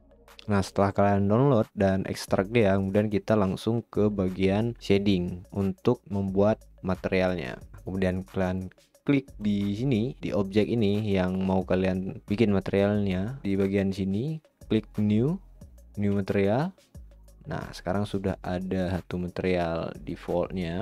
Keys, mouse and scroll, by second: 6.0-7.7 drag, 7.7-9.5 middle drag, 9.5-11.0 drag, 11.0 middle click, 11.6-12.2 shift+middle drag, 14.8-20.8 drag.